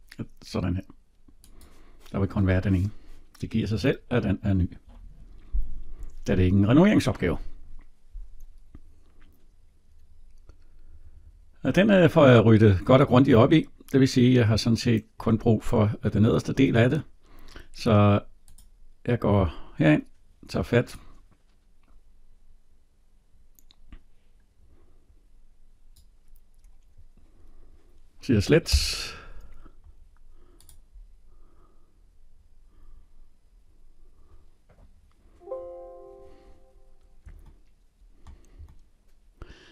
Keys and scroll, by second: 28.7 Delete.